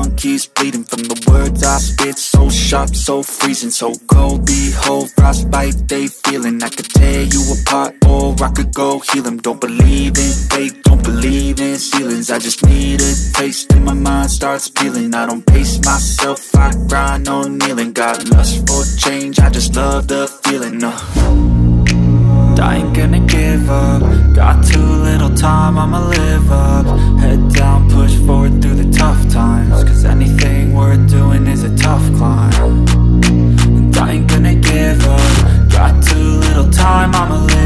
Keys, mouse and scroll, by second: 1.2 shift+Tab, 2.3 click, 5.4 click, 20.7 Tab, 26.1 Tab, 27.6 Tab, 28.8 shift+Tab, 29.5 shift+Tab, 30.0 shift+Tab, 32.2 click, 34.3 click.